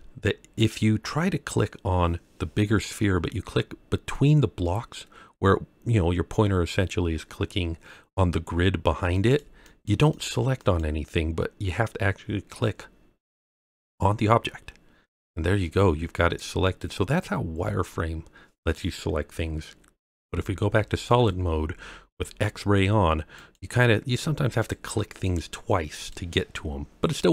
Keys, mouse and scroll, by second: 3.6-4.1 scroll up 2, 9.1 click, 9.6 click, 10.1 click, 10.5 click, 13.4 click, 16.6 click, 17.1-17.6 scroll down 2, 17.6-18.7 middle drag, 20.1 z, 23.4 click, 24.6 click, 25.2 click, 25.9 click.